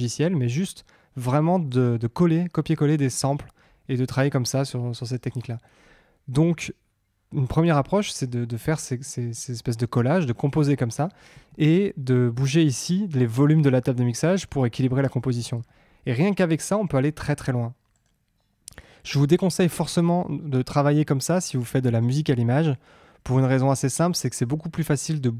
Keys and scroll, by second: 11.3 Tab, 15.3 Tab.